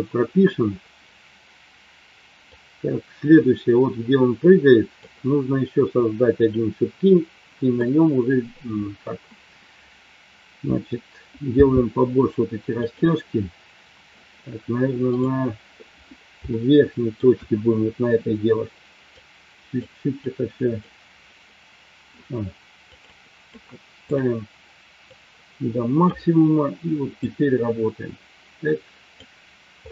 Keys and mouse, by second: 2.8-5.3 drag, 6.3 click, 11.5 f, 15.4 drag, 16.5 shift+middle click, 19.1 click, 20.3 click, 22.9-24.2 drag, 25.0-26.2 drag, 27.2-29.1 drag.